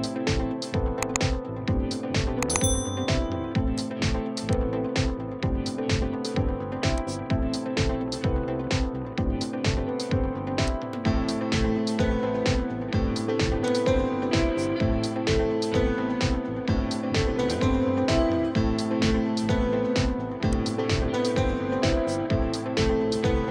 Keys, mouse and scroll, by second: 2.2 typing, 2.5 Return, 4.6 double click, 5.5 typing, 6.0 Return, 7.4-7.8 scroll up 1, 7.8 middle click, 11.3 middle click, 11.9 scroll down 1, 11.9 middle click, 16.8 scroll down 1, 17.0 middle click, 22.1 middle click, 22.3 Escape, 22.7-23.4 scroll up 1.